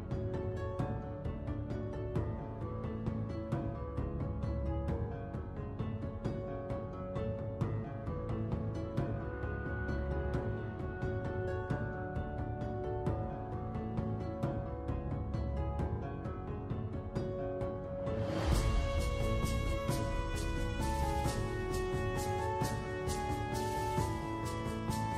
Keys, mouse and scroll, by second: 2.0 F6, 5.2 ctrl+right click, 9.7 Tab, 10.2 2, 10.8 click, 11.7 r, 13.3 click, 14.6-16.2 alt+drag, 17.0 Tab, 17.4 Tab, 18.0 click, 18.2 click, 18.7 alt+click, 20.0-20.9 shift+right drag, 21.4 Tab, 21.8 Tab, 22.5 ctrl+2, 23.1 Tab, 23.8 ctrl+2, 24.3 ctrl+3.